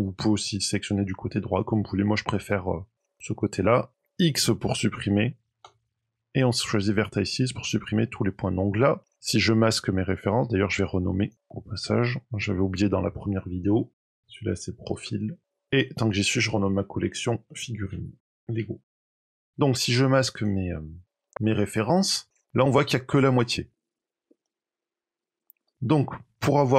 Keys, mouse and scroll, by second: 2.6 middle click, 3.1 middle click, 5.5 x, 7.6 middle click, 11.1 click, 11.3 click, 15.6 click, 15.8 click, 19.9 click, 21.8 middle click, 23.9 click, 24.2 Tab, 24.4 middle click, 25.2 click, 25.4 middle click.